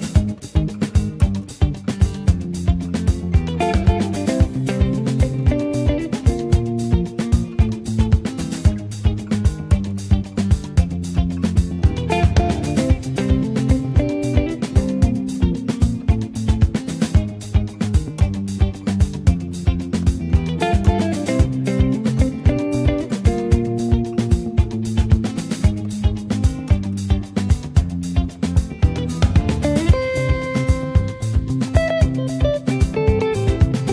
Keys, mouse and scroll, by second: 2.4-2.8 scroll up 2, 2.8 click, 3.2 middle click, 4.0 Tab, 4.3 middle click, 4.5 scroll up 1, 4.8 shift+middle click, 5.4 n, 5.7-6.1 scroll up 2, 6.1 shift+middle click, 6.3 scroll down 3, 6.6 middle click, 7.3-7.7 scroll up 2, 7.7 middle click, 8.3-8.6 scroll down 2, 8.6-10.3 shift+middle drag, 10.3-10.8 scroll up 1, 10.8 scroll down 1, 11.8 click, 12.6 s, 15.1 click, 16.9 click, 17.7-25.4 drag, 25.4 space, 26.5-30.5 drag, 30.9 Tab, 31.6 click, 31.9-33.1 middle drag, 33.1 click.